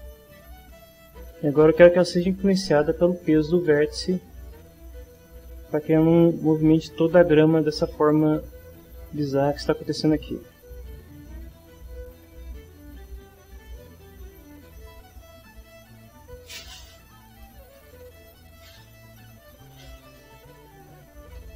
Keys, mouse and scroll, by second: 5.2 middle click, 7.8 middle click, 10.7 click, 11.9 click, 16.3 click.